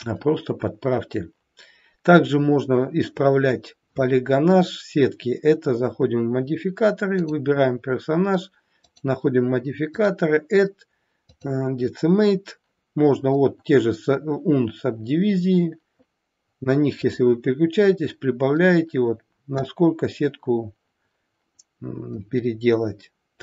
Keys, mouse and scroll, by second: 7.2 click, 8.7 click, 17.1 click.